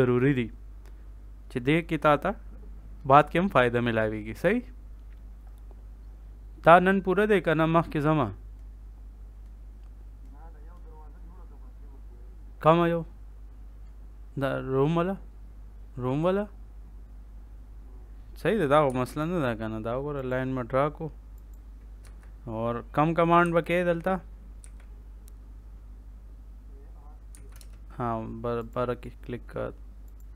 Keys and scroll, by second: 18.8 l, 19.0 space, 21.9 Escape, 23.4 a, 24.5 r, 27.2 c, 27.5 space.